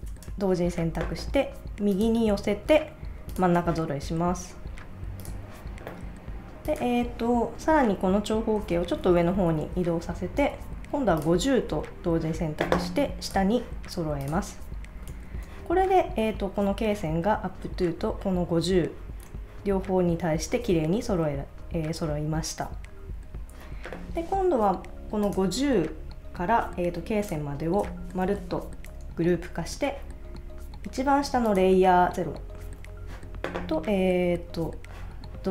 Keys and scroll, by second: 15.1 super+s.